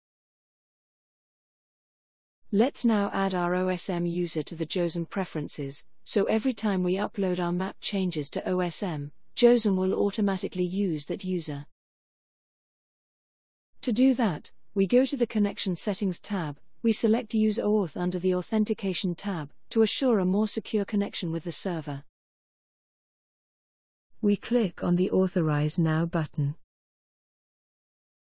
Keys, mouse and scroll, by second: 0.0 click, 15.8 click, 26.1 click, 28.1 click.